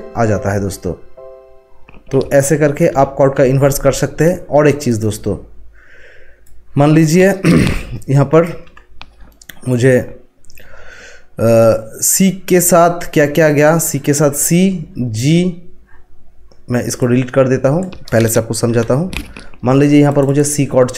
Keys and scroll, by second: 2.9 z, 4.3 ctrl+z, 8.6 Delete, 18.7 Delete.